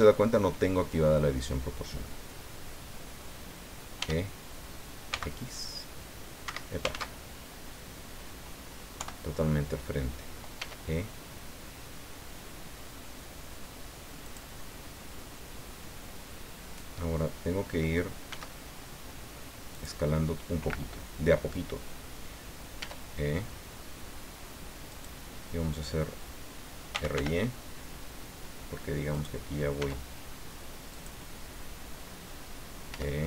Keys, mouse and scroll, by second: 4.0 e, 5.1 x, 6.4 Escape, 6.9 ctrl+z, 9.0 KP_1, 10.6 e, 14.2 click, 18.3 s, 19.8 click, 22.8 e, 24.9 click, 26.7-27.6 typing, 29.2 click, 29.8 s, 30.9 click, 32.9 e.